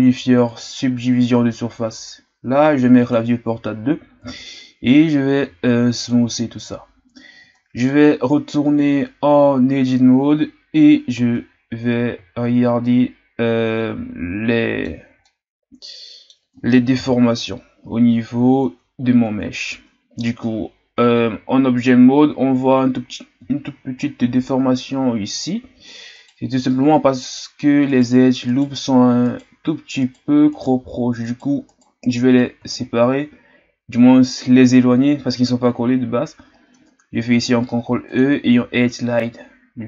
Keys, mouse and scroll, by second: 0.6 click, 2.9-5.4 drag, 5.4 w, 7.4 Tab, 9.6 shift+scroll down 2, 11.2 Tab, 11.8-12.3 scroll down 2, 12.3-12.8 shift+scroll up 3, 12.8-16.9 middle drag, 16.9 KP_1, 17.9 scroll up 2, 18.6 Tab, 19.2 Tab, 20.1 Tab, 21.3-22.4 shift+scroll down 5, 22.4 Tab, 23.6-25.9 shift+scroll up 5, 26.1-31.8 right drag, 32.7-35.8 shift+scroll down 4, 37.1 ctrl+e.